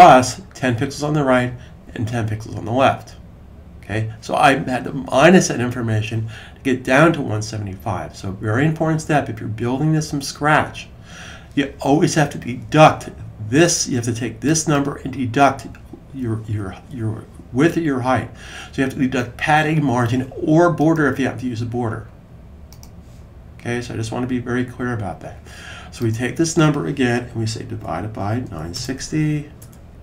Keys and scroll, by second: 27.4-29.0 typing.